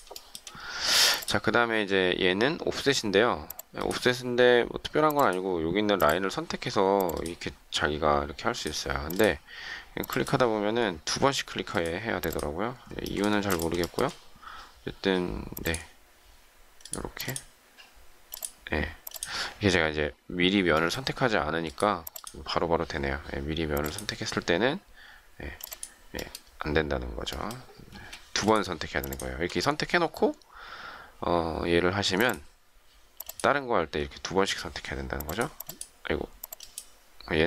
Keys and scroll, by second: 13.3 shift+space, 27.9 space.